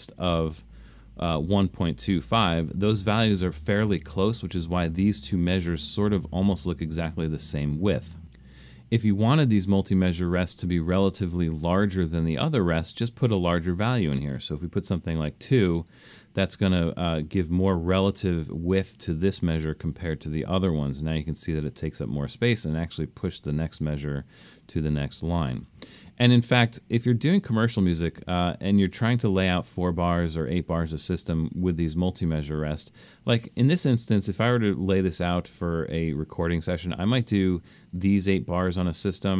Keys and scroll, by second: 14.8 2, 24.0 super+z.